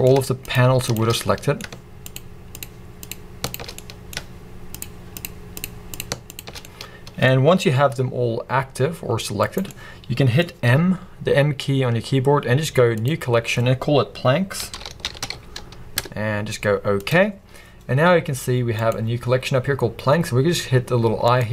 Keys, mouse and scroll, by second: 0.4 shift+click, 0.8 shift+click, 1.2-2.1 middle drag, 2.1 shift+click, 2.5 shift+click, 3.0 shift+click, 3.4 shift+click, 3.7-4.7 middle drag, 4.7 shift+click, 5.2 shift+click, 5.5 shift+click, 5.9 shift+click, 6.3 shift+click, 6.5 scroll down 1, 6.7-9.6 middle drag, 7.3-7.8 scroll up 1, 7.8 g, 9.6 right click, 9.7-18.7 middle drag, 10.7 m, 14.5 m, 18.7 click, 21.3 click.